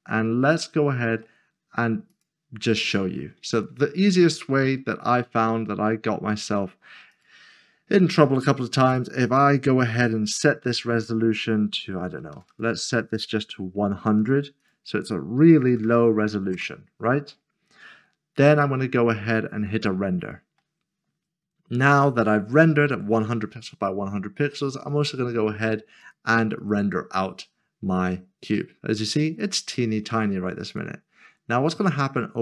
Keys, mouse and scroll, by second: 3.5 click, 7.1 click, 12.0-12.5 typing, 14.2 click, 14.6 double click, 15.5-15.9 typing, 16.5 Return, 20.2 click, 24.9 click, 30.7 click.